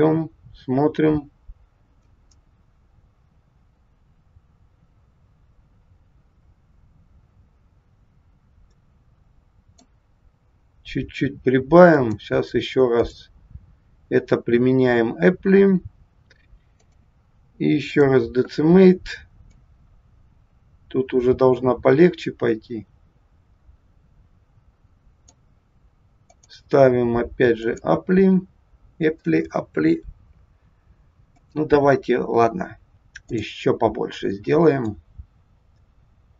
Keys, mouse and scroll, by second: 11.9 click, 16.8 click, 19.5 click, 26.3 click, 31.4 click, 34.9 click.